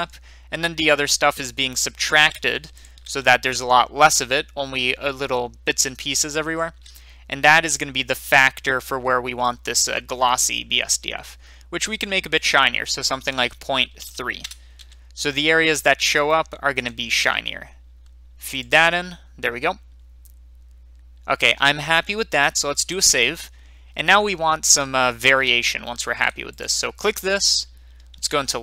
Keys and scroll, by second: 13.9 typing, 14.3 Return, 22.7 ctrl+s.